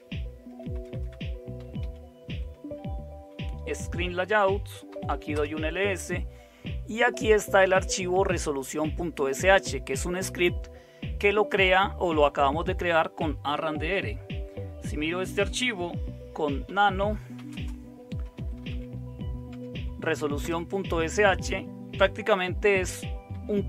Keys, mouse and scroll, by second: 0.0-5.8 typing, 16.4-19.2 typing, 19.5 Tab, 20.4 Return, 23.3 Down.